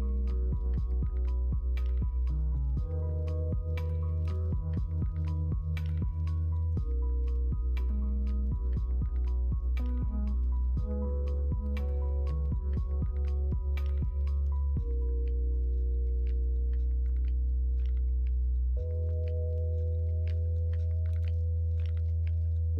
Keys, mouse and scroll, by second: 0.0 shift+a, 0.8 middle click, 1.9 s, 4.6 middle click, 5.7-6.0 scroll up 1, 6.5 middle click, 7.7 middle click, 9.1 middle click, 9.5 shift+a, 14.9 click, 14.9 KP_1, 18.4-20.7 middle drag.